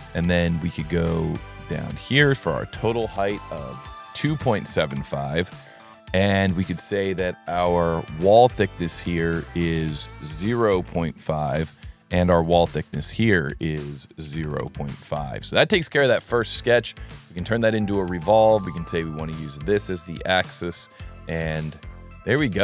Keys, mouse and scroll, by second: 0.5 click, 1.8 click, 2.5 click, 8.4 click, 9.4 click, 10.0 click, 12.3 click, 13.0 click, 13.4 click, 15.2 scroll up 1, 17.1 click, 18.5 click, 19.6 right click, 20.8 right click, 21.3-21.7 middle drag.